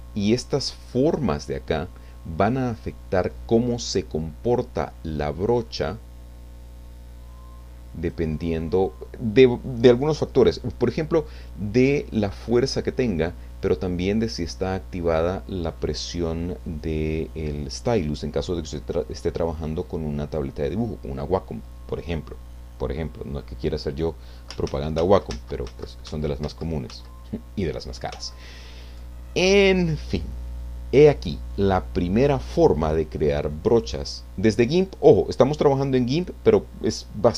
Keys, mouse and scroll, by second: 1.0 click, 5.6-8.3 drag, 24.9 ctrl+z, 33.4-33.8 scroll down 2, 35.0 click.